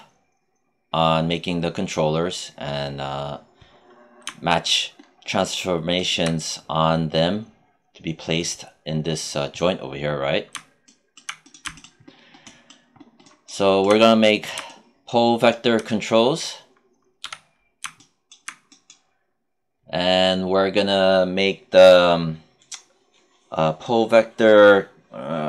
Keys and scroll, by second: 17.1 q.